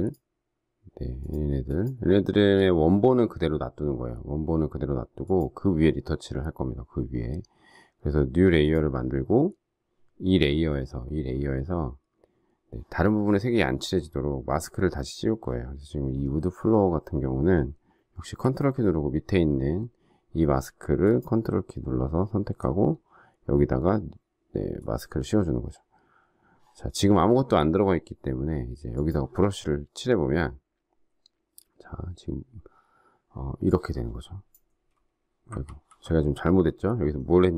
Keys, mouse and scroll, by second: 21.0 ctrl+click, 35.6 ctrl+z.